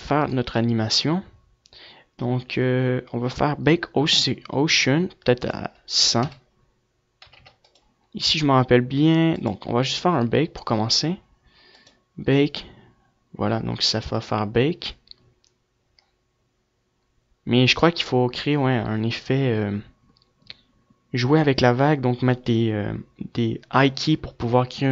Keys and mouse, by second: 1.5-4.7 drag, 6.8-15.3 drag.